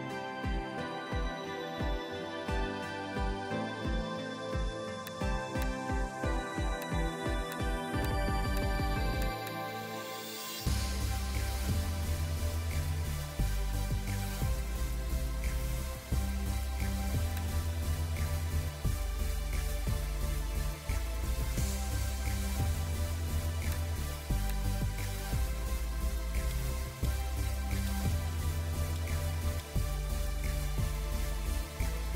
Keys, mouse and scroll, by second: 3.3 scroll up 1, 9.4 double click, 9.8 scroll down 1, 14.0-15.5 scroll down 1, 16.8-18.2 scroll up 1, 23.1 scroll down 1.